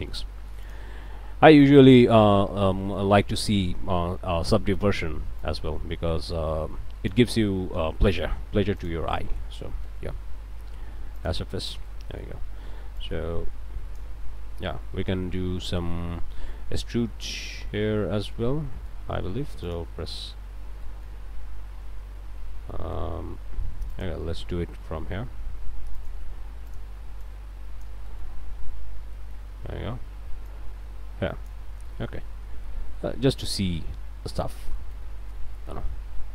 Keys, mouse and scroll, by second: 0.6 alt+click, 2.5 a, 2.9 click, 3.5 middle click, 4.4 d, 5.4-7.3 drag, 8.1 a, 8.8 alt+click, 9.8 q, 11.2 click, 11.9 click, 13.0-14.2 drag, 15.0 a, 16.6 scroll down 2, 17.0-18.8 middle drag, 18.8 click, 19.1 a, 19.7 alt+click, 20.8 click, 21.0 middle click, 21.2 scroll up 1, 22.7 middle click, 23.4 a, 23.9 alt+click, 24.8 e, 26.0 click, 26.7 click, 27.2 click, 29.1 click, 30.5-31.7 drag, 31.9 click, 32.3 Tab, 32.6 scroll down 1, 33.4 middle click, 34.8 middle click, 35.3 click, 36.2 alt+a.